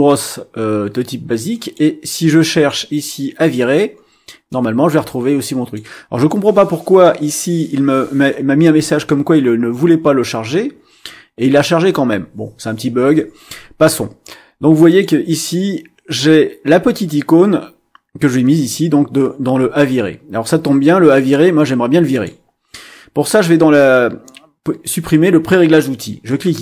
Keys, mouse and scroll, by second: 1.5 click, 3.4 click, 4.5-5.9 drag, 14.9 click, 22.1 click, 26.3 click.